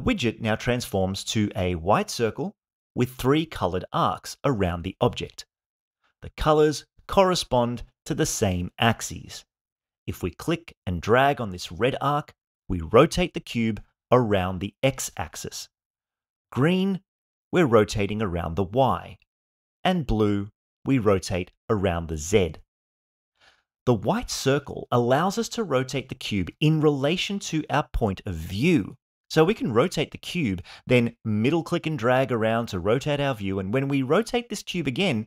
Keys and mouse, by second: 11.6 click, 12.1-15.5 drag, 16.6 click, 17.1-19.7 drag, 20.6 click, 22.5-24.3 drag, 25.1 click, 26.2-29.3 drag, 30.0-32.4 middle drag, 33.0 click, 33.5-35.2 drag.